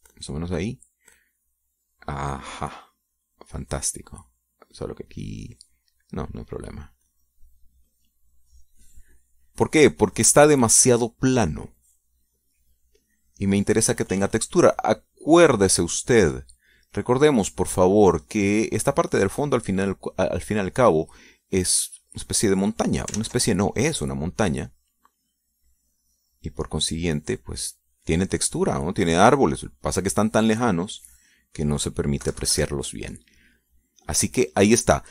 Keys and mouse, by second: 0.0-1.4 drag, 2.6-6.6 drag, 6.7 middle click, 7.6-9.4 drag, 9.4 middle click, 9.9 click, 11.2-12.5 drag, 12.7-17.0 drag, 17.0 click, 18.3-20.2 drag, 20.8-24.4 drag, 24.8 ctrl+z, 26.2-29.1 drag, 29.2 middle click, 30.2 click, 30.8 click, 31.9-33.2 drag, 33.9 KP_Subtract, 34.6 click.